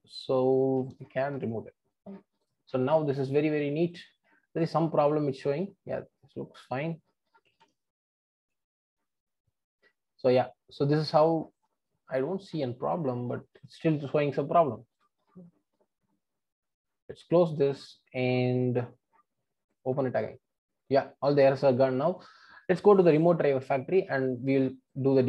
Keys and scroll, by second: 0.9 super+BackSpace.